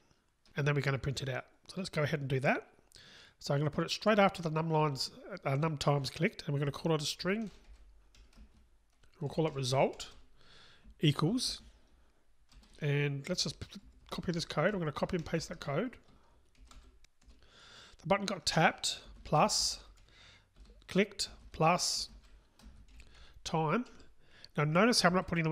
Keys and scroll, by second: 15.1 alt+shift+Right, 15.4 alt+shift+Right, 16.6 alt+shift+Right, 20.6 super+v, 24.6 Return.